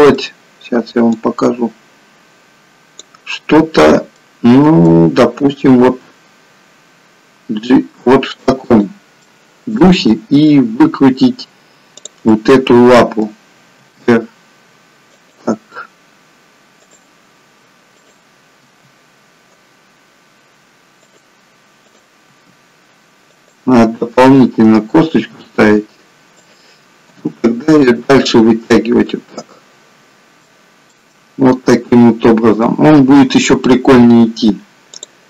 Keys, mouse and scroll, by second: 1.3 click, 4.1 middle click, 5.8 g, 9.1 middle click, 9.9 middle click, 11.8 click, 12.2 middle click, 14.0 r, 16.8 click, 18.0 click, 18.8 r, 21.9 click, 22.3 r, 24.3 click, 25.3 r, 27.3 g, 28.7 middle click, 34.8 click.